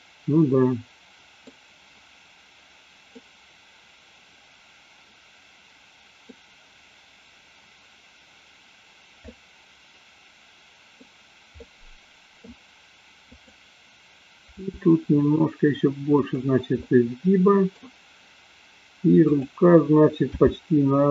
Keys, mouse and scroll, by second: 3.2-6.3 middle drag, 9.3-11.0 middle drag, 11.7-12.5 middle drag, 13.3-14.0 drag, 14.7 r, 16.4 click, 16.8-17.9 middle drag, 19.2 click, 20.3 g.